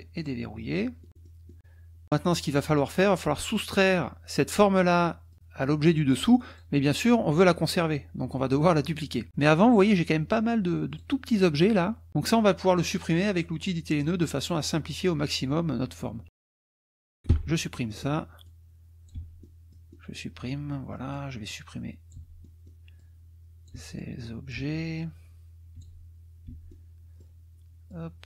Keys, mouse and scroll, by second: 0.2 drag, 1.0 click, 2.0 click, 5.3 click, 6.5 click, 9.8 click, 10.9 click, 14.2 click, 16.6 click, 17.3 Delete, 17.6 middle click, 18.4 click, 19.1 Delete, 19.4 middle click, 20.5 middle click, 21.5 click, 22.1 Delete, 22.4 middle click, 22.8 click, 23.0 click, 23.7 Delete, 24.0 click, 24.5 Delete, 25.0-26.0 drag, 25.7 Delete, 26.5 Delete, 26.7 click, 27.9 click.